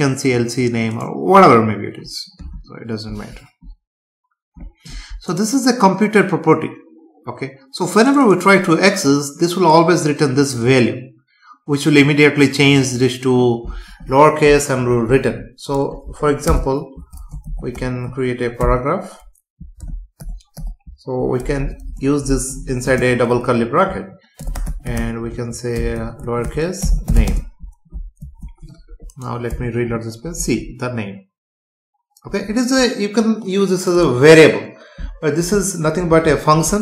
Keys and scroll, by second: 16.5 Return, 22.9 space, 27.3 space, 28.2 ctrl+s, 29.5 F5.